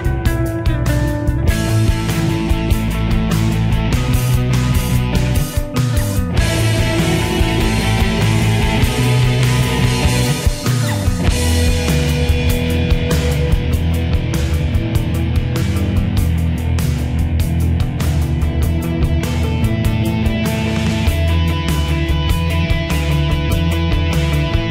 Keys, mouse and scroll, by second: 1.7 click, 3.1 shift+Page_Down, 8.2 ctrl+r, 11.2 right click, 13.0 click, 15.5 F3, 17.7-19.6 drag, 19.6 F2, 21.0 F4, 22.7-24.7 drag.